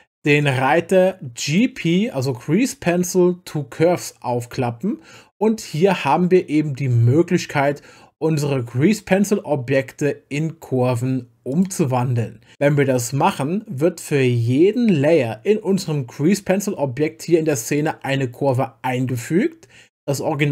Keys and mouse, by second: 0.4 click, 1.5 click, 11.5 click, 17.8 click, 18.5 click, 19.1 click.